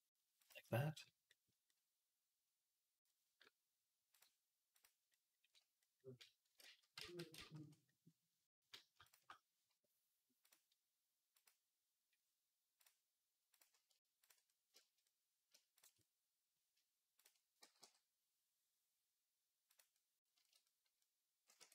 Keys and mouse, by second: 0.7-1.8 drag, 1.8-4.0 middle drag, 4.0 click, 4.6-8.9 middle drag, 6.4 ctrl+z, 6.8 ctrl+z, 7.5 ctrl+z, 8.9 shift+click, 9.1-10.3 middle drag, 10.3-11.3 drag, 11.3-12.6 middle drag, 12.6 click, 13.4 middle click, 14.1 shift+click, 14.1 shift+middle click, 15.0 click, 15.8-17.0 middle drag, 17.0 shift+click, 17.1-21.7 shift+middle drag, 17.5 g, 21.4 Tab.